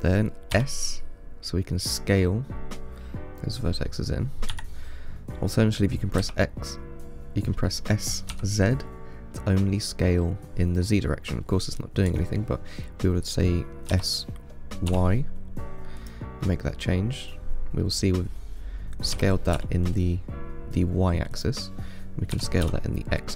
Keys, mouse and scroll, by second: 0.8 s, 6.4 s, 14.1 s, 16.7-19.4 middle drag, 19.4 s, 22.6 s.